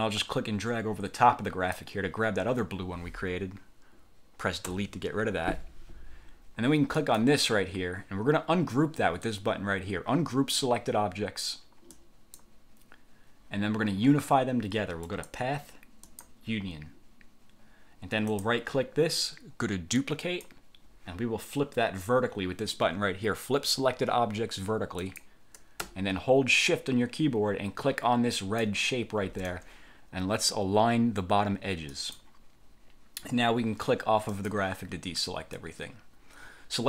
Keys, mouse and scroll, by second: 4.8 Delete, 7.1 click, 12.1 click, 15.2 click, 16.1 click, 18.4 click, 20.1 click, 25.1 click, 28.5 shift+click, 32.1 click, 34.5 click.